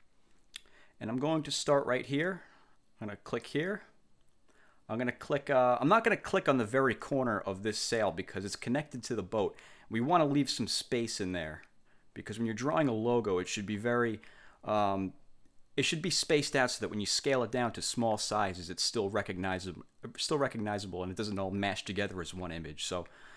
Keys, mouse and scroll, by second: 3.4 click.